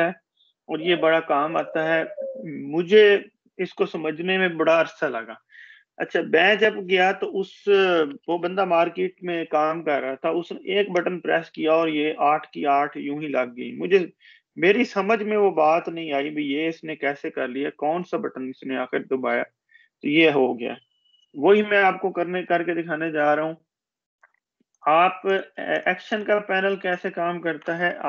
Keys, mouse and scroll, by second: 0.3 click, 4.4 click, 25.8 click.